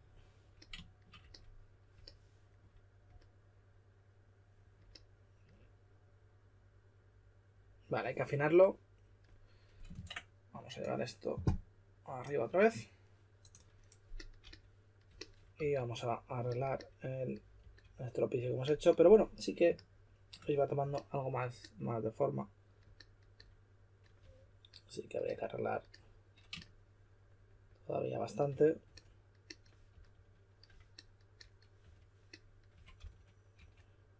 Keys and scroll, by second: 9.9 super+Tab, 15.5 s, 17.5 s, 24.2 3, 29.9 s, 31.8-33.5 typing.